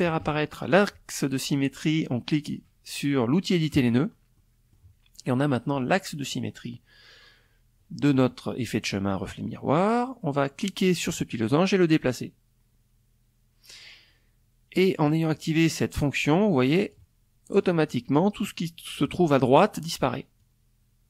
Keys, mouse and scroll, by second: 2.3 click, 2.9 middle click, 9.8-13.7 drag, 14.8 click, 15.3 click, 16.1 middle click, 18.9-21.0 drag.